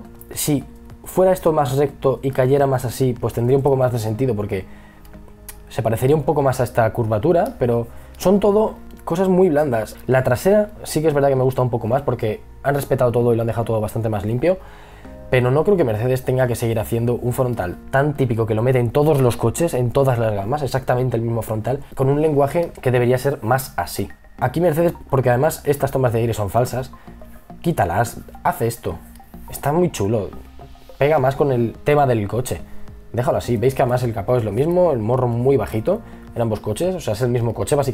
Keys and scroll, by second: 7.1 e, 8.1 b.